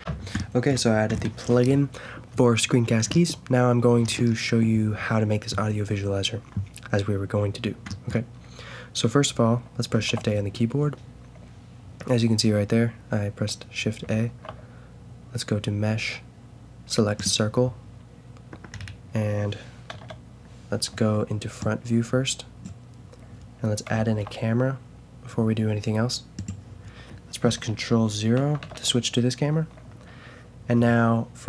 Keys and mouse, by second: 0.0 F9, 0.0 n, 9.9 shift+a, 14.2 shift+a, 18.7-19.9 middle drag, 19.9 KP_0, 23.9 shift+a, 28.6 ctrl+KP_0.